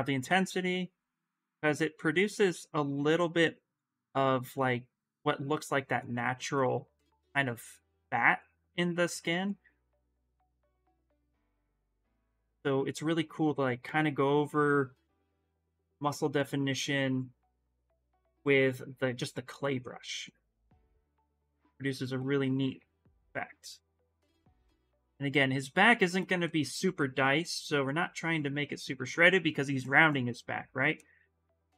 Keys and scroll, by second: 5.3 space, 6.0 ctrl+z, 6.4 ctrl+z, 6.8 ctrl+z.